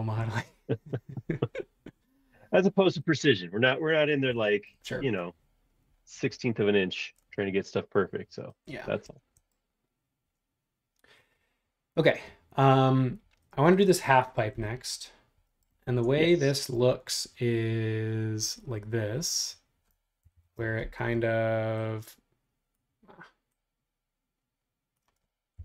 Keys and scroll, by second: 2.3 super+1, 15.9 super+Tab, 20.2 super+=, 20.3 super+=.